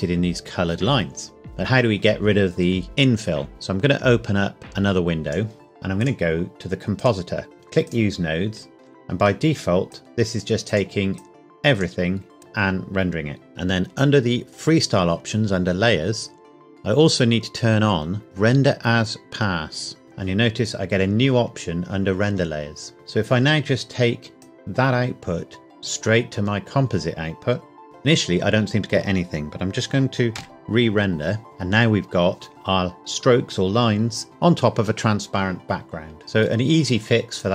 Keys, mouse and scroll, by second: 4.6 click, 5.6-6.0 scroll down 1, 6.0 click, 7.5 scroll down 1, 7.8 click, 8.6-9.9 scroll up 1, 9.9 click, 20.0 click, 23.0 scroll down 1, 24.4 click, 30.3 F12, 36.2 middle click, 37.4 click.